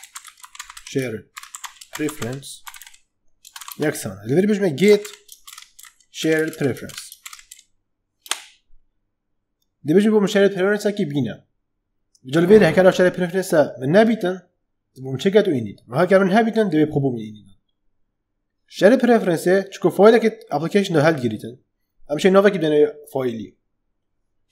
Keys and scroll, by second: 0.0-7.4 typing, 8.2 Return.